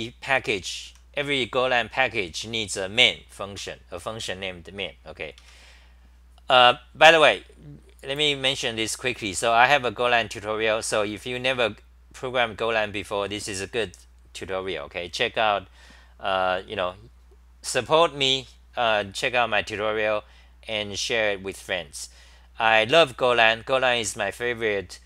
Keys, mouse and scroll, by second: 0.8 r, 2.3 2, 3.5 ctrl+g, 5.4 Home.